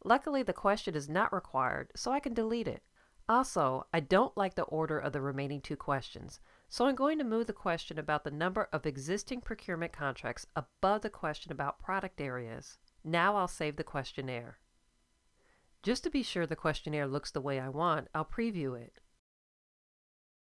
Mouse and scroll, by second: 0.0-1.2 drag, 2.0 click, 11.6 click, 12.0 click.